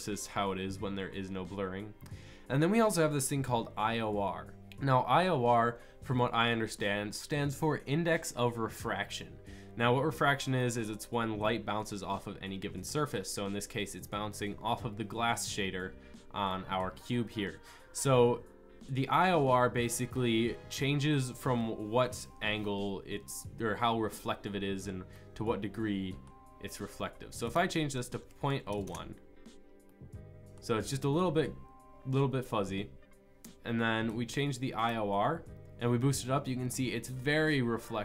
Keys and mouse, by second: 9.4 click, 34.4-37.6 drag.